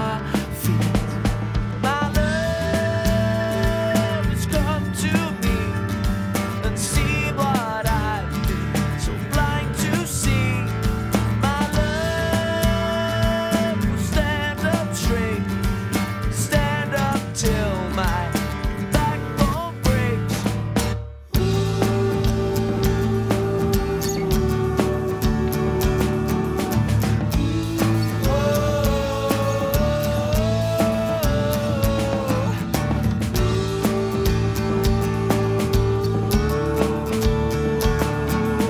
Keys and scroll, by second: 25.0 super+=.